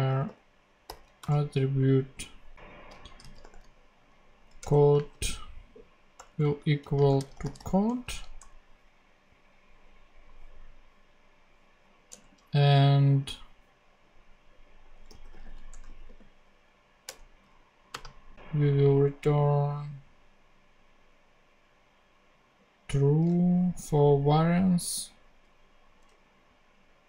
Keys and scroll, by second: 0.0 t, 0.8 r, 1.1 ., 2.5 super+`, 2.9-3.8 typing, 4.5 Return, 4.9 space, 6.9-8.0 typing, 8.3 super+;, 9.2 ;, 12.0 Return, 15.2-16.5 typing, 17.0 Return, 17.8 space, 26.0 a.